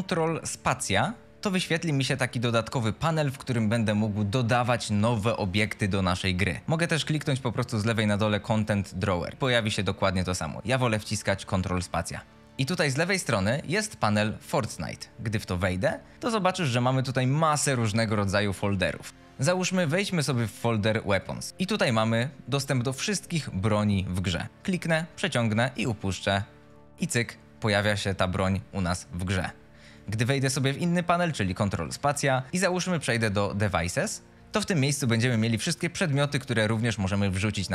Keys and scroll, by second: 22.0 F22, 26.8 a, 28.0 d, 28.3 s, 30.0 w.